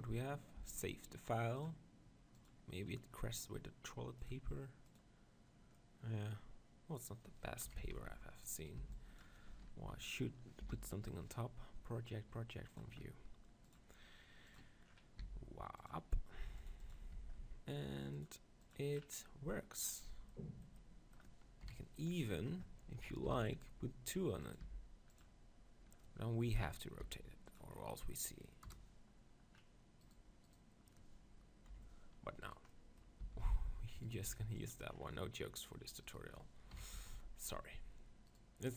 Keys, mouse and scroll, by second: 0.6 Tab, 2.9 middle click, 4.2-6.1 drag, 5.7-7.7 middle drag, 7.7 KP_1, 7.8 Tab, 8.6-10.5 drag, 8.6 z, 8.8 b, 9.8 KP_7, 10.6 u, 13.7 click, 16.9-19.5 drag, 16.9 s, 17.1 Tab, 20.0 middle click, 21.6 KP_1, 23.2 shift+d, 24.6 r, 25.2-27.0 drag, 26.5 KP_7, 27.0 r, 28.6 KP_0, 30.1-31.7 right drag, 31.7 KP_7, 32.5 right click, 33.2 c, 34.2 x, 34.7 right click, 36.8 KP_1, 36.9 Tab, 37.1 z.